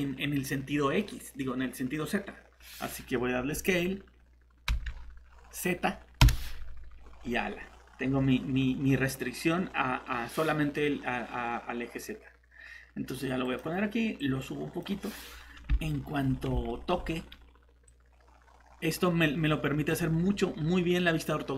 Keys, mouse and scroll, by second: 0.7 middle click, 4.7 s, 6.2 z, 13.4 click, 15.0-15.7 scroll up 1, 15.9 middle click, 16.1 scroll up 1, 16.7 middle click, 17.0 scroll down 1, 17.9 click.